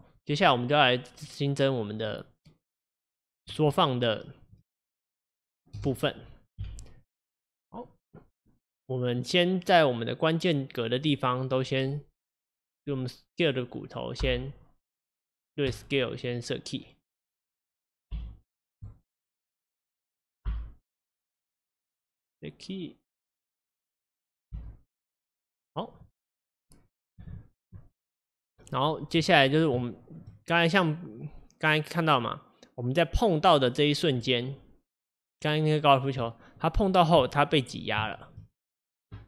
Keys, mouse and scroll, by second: 1.2-3.3 middle drag, 3.3-4.7 drag, 4.7 space, 5.9 space, 6.2 click, 6.6 KP_1, 7.9 click, 9.2-12.8 drag, 13.4 click, 15.8 i, 16.8-18.9 drag, 18.9 i, 19.9-25.7 drag, 25.7 i, 29.9-31.1 shift+middle drag, 31.1-35.8 drag, 35.8-36.4 scroll up 2, 36.4 shift+middle click, 36.7 shift+scroll, 36.8 scroll up 1, 38.0 scroll up 1, 38.1-39.2 shift+middle drag.